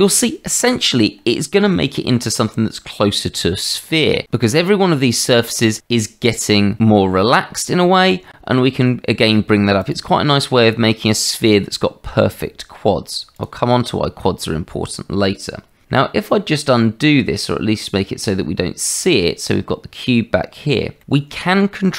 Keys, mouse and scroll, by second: 9.8 click, 13.1 click, 13.4 click, 19.0 click, 21.0 middle click.